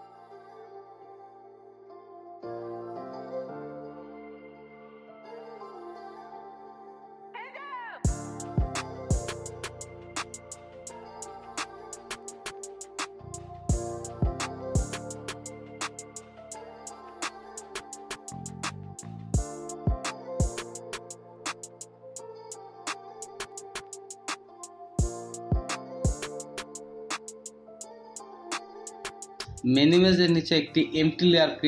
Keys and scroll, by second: 3.1 space, 3.7 space, 7.0 ctrl+z, 8.1 space, 8.4 space, 8.5 space, 13.2 space, 14.2 ctrl+z, 14.2 space, 14.5 space, 14.6 space, 16.3 ctrl+z, 17.4 space, 17.7 ctrl+z, 17.8 ctrl+z, 18.3 space, 18.5 space, 20.6 alt+space, 21.3 v, 25.4 Return, 25.8 ctrl+z, 26.7 space.